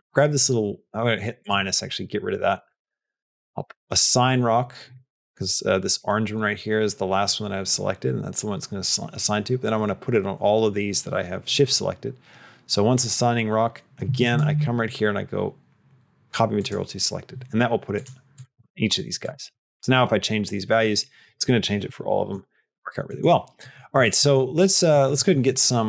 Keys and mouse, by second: 1.3 click, 2.7-4.2 drag, 14.1-16.6 drag, 18.5 click, 19.1 click, 19.4 click, 23.0 middle click, 23.8 click, 24.0 middle click, 24.8 middle click.